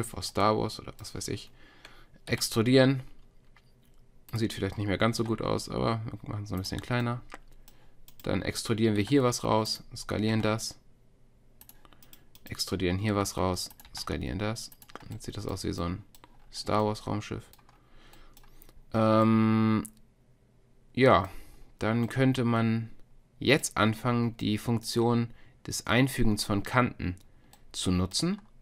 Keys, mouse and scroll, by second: 2.4 e, 5.2 s, 8.1 click, 9.0 e, 10.3 s, 13.1 e, 14.1 s, 15.1-16.5 drag, 17.0 click, 27.9-28.6 drag.